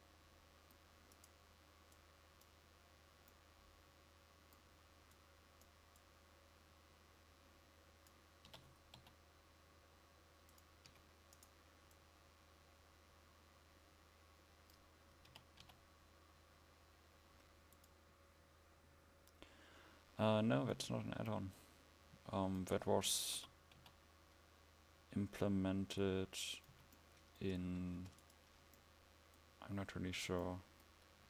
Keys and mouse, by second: 8.6 r, 11.0 a, 15.3 r, 26.8 a, 28.0 ctrl+s, 31.2 KP_7.